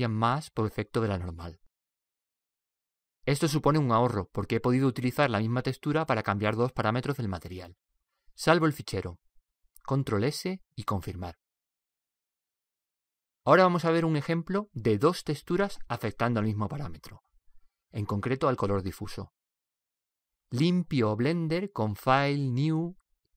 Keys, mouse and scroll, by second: 1.3 middle click, 14.0 click.